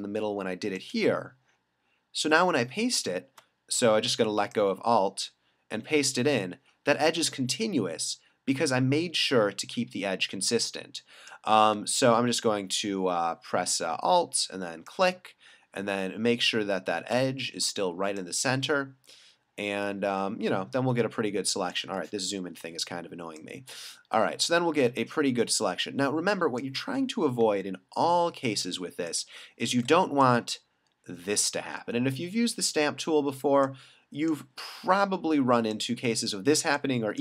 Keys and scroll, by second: 22.5 alt+super+-.